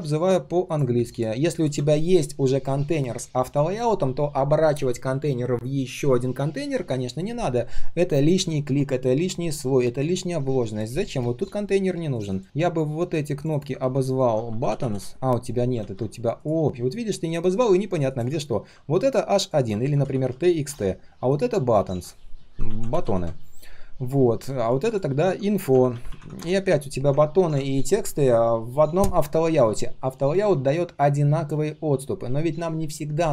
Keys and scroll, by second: 11.4 ctrl+shift+g, 15.7 ctrl+z, 21.8 ctrl+r.